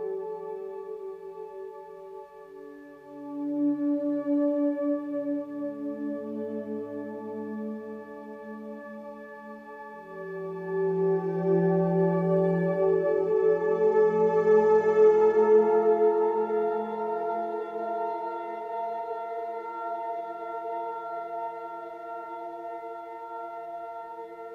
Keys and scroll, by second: 2.3 ctrl+j.